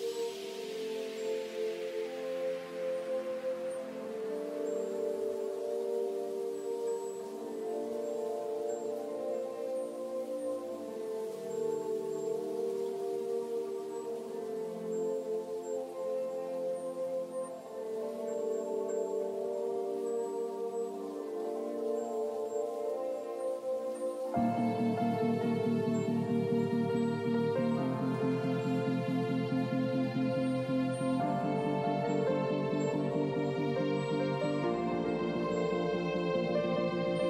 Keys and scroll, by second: 18.3 ctrl+g, 35.3 ctrl+g, 36.5 ctrl+z.